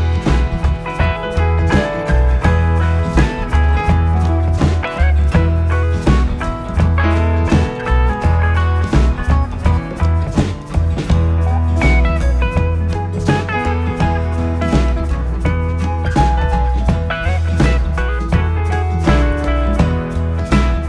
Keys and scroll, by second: 0.2 ], 2.6 ctrl+d, 2.7 Escape, 3.6 4, 4.6 3, 6.1 4, 6.5 3, 8.0 ], 10.4 5, 14.9 4, 20.3 4, 20.8 ].